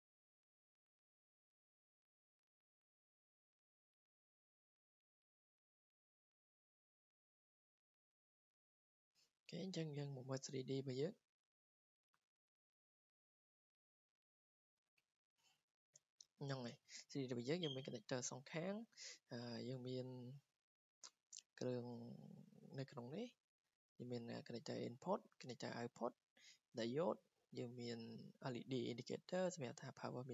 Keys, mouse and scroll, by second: 1.5 scroll down 6, 3.9 click, 4.1 scroll, 4.7-5.2 scroll, 6.5 click, 8.3 right click, 8.9 Escape, 9.1 Escape, 9.2-10.9 scroll up 18, 10.9-11.3 scroll, 11.7-12.1 scroll, 13.1 scroll down 10, 13.8 click, 15.1 scroll, 16.6 scroll, 17.4 click, 18.5 click, 19.0 scroll down 5, 20.9 click, 24.1 click, 30.1 click.